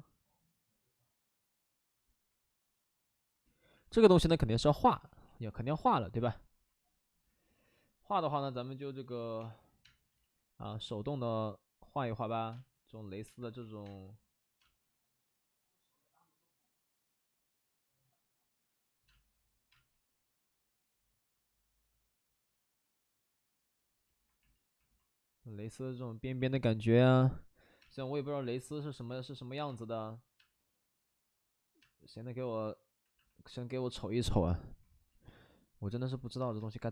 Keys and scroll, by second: 4.8 space, 9.0 ctrl+z, 9.3 2, 9.8 space, 10.1 ctrl+z, 12.5 space, 13.2 space, 13.5 ctrl+z, 13.8 space, 14.6 space, 19.1 space, 19.7 space, 20.4 space, 27.8 space, 29.0 ctrl+z, 30.4 space, 33.1 space, 36.2 space.